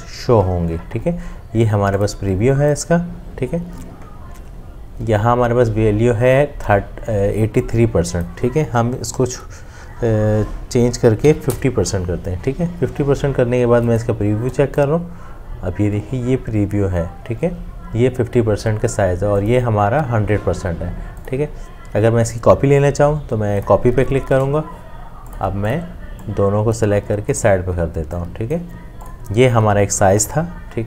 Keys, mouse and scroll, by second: 11.3 typing.